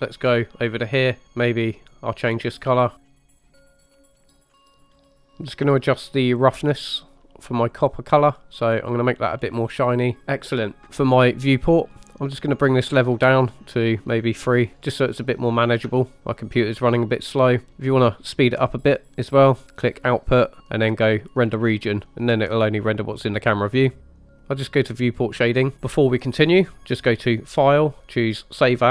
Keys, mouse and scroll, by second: 0.4 scroll up 2, 0.9 middle click, 1.2 scroll up 2, 1.8 click, 2.6 scroll up 1, 3.5 click, 4.2 scroll up 2, 4.4 click, 4.8 click, 5.3 middle click, 6.3 middle click, 7.8-8.3 drag, 8.6 click, 12.8 click, 14.0 click, 16.2 shift+middle click, 19.9 click, 21.3 click, 24.4 click, 25.4 click, 27.4-28.9 drag.